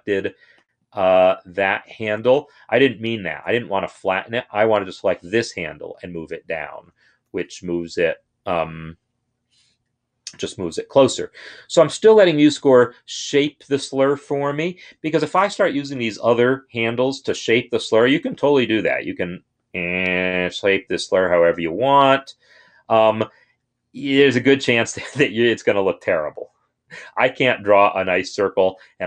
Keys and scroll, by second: 2.9 ctrl+r, 5.5-7.2 Down, 6.0 Down, 11.5 Escape.